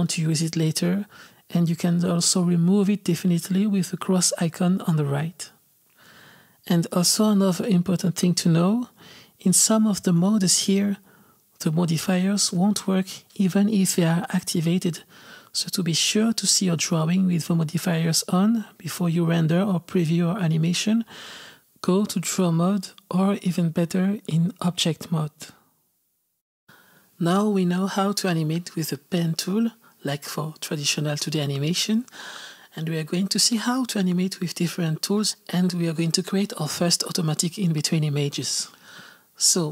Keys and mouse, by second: 10.3 click, 11.1 click, 13.6-16.6 drag.